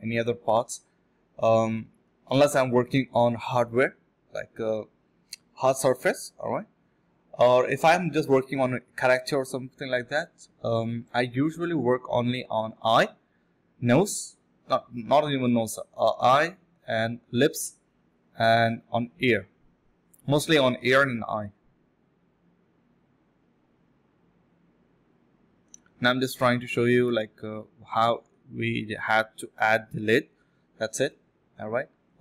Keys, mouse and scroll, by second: 0.0 typing, 2.2 typing, 8.0 alt+click, 8.3 alt+click, 8.5 alt+click, 9.4 alt+click, 11.2 ctrl+b, 11.9 double click, 12.6 shift+click, 12.7 shift+double click, 12.8 shift+click, 13.3 double click, 13.4 shift+click, 13.5 shift+double click, 13.6 shift+click, 14.1 alt+click, 14.3 alt+click, 15.4-16.0 scroll down 2, 15.5 middle click, 16.0 middle click, 16.1-16.5 scroll up 2, 16.3 middle click, 16.8 scroll down 1, 17.3 middle click, 18.1-18.5 scroll up 1, 18.5 middle click, 19.4 scroll down 1, 19.5 middle click, 21.8 scroll up 1, 22.1-22.9 scroll down 3, 22.3 middle click, 22.6 middle click, 22.9 middle click, 23.0 scroll up 1, 23.2 middle click, 24.6-25.3 scroll up 1, 26.1 alt+click, 26.4 alt+click, 26.9 alt+click, 29.3 ctrl+b, 29.6 double click, 31.2 double click, 32.0 space.